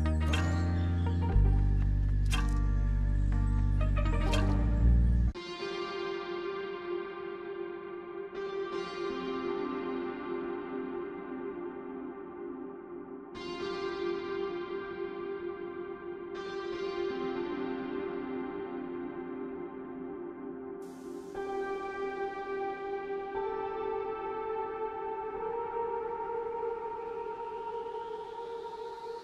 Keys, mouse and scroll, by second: 0.0-0.5 typing, 0.8 Return, 2.1 right click, 2.6-3.6 typing, 3.9 alt+middle click, 4.8 F3, 6.5 middle click, 6.7 right click, 10.1 a, 10.6 double click, 15.9 double click, 16.3 right click, 20.6 right click, 22.5 9, 23.9 double click, 24.0 double click, 24.1-25.0 typing, 27.9 Escape.